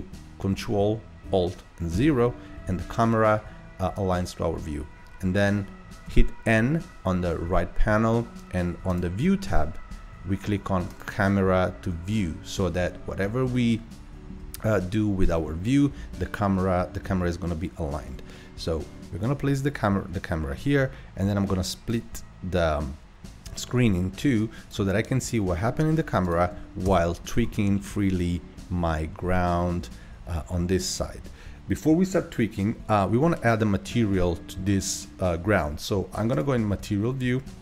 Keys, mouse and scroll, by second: 1.9 ctrl+alt+KP_0, 6.1 n, 8.9 click, 10.9 click, 12.6 n, 13.6-14.8 shift+middle drag, 14.8 scroll up 1, 15.5 scroll up 1, 15.5-15.9 scroll down 1, 16.2-16.7 shift+middle drag, 16.7-17.1 scroll up 1, 17.1-20.2 shift+middle drag, 21.9-26.3 drag, 26.8 KP_0, 27.7-28.1 scroll down 4, 28.1-28.7 middle drag, 28.7-29.4 scroll up 2, 29.4-30.2 shift+middle drag, 30.2 scroll up 2, 30.5 scroll down 2, 30.9-31.2 scroll up 1, 36.5-37.6 drag.